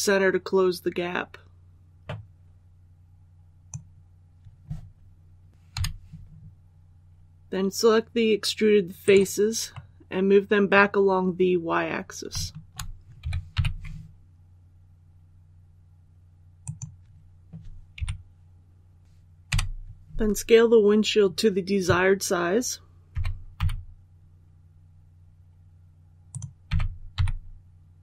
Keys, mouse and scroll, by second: 5.6 3, 8.9 right click, 9.6-11.0 middle drag, 11.2-12.2 scroll up 1, 12.2 shift+middle click, 13.1-13.4 typing, 16.5 click, 17.8 KP_1, 19.4 l, 23.0-23.4 typing, 26.2 click, 26.5-27.0 typing.